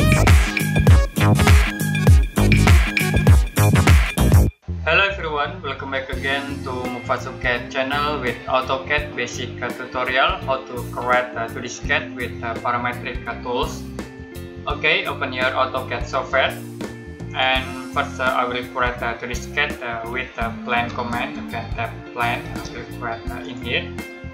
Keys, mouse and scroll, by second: 17.2 click, 20.0 click, 20.8-22.4 typing, 23.3 click.